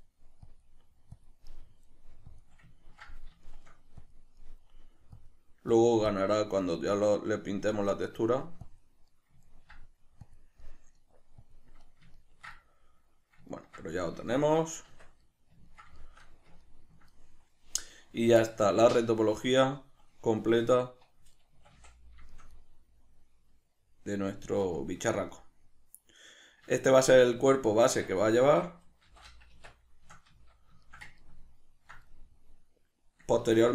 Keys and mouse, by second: 0.0 middle click, 0.5-1.5 drag, 1.5 middle click, 2.3 click, 2.8-4.0 ctrl+middle drag, 4.0 click, 4.4 middle click, 5.2-6.7 drag, 6.7-7.8 middle drag, 7.8 click, 8.2 middle click, 8.6 click, 9.1-10.2 middle drag, 10.2 click, 10.6 middle click, 11.4 click, 11.8-33.7 middle drag, 14.9 Tab, 20.4 Tab, 21.5 a, 27.3 Tab, 29.0 shift+n, 33.4 Tab.